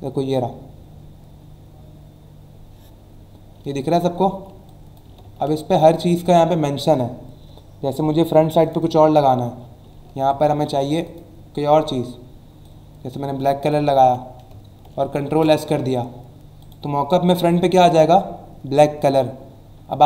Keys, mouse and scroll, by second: 3.9 alt+scroll up 1, 4.6 click, 5.2 ctrl+z, 8.6 click, 10.0 alt+scroll down 1, 11.0 click, 12.6 click, 14.0 v, 15.2 ctrl+s, 16.6 click.